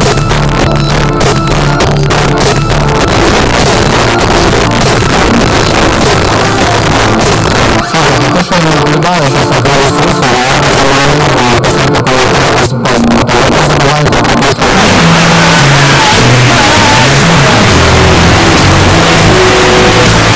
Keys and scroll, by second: 20.3 space.